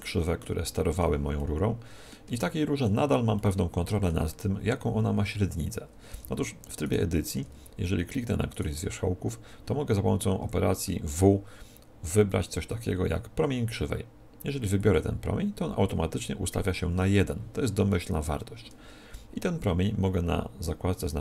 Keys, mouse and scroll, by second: 6.0 Tab, 6.8-10.2 right drag, 7.2 Tab, 10.2 middle click, 10.3 w, 16.1 t, 20.6-21.2 drag.